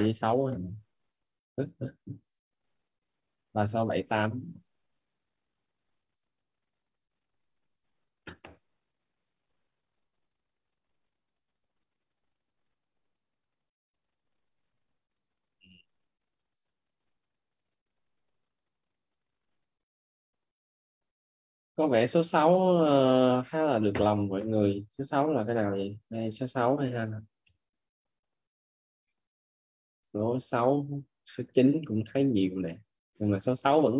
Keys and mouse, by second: 8.8 click, 14.5 click.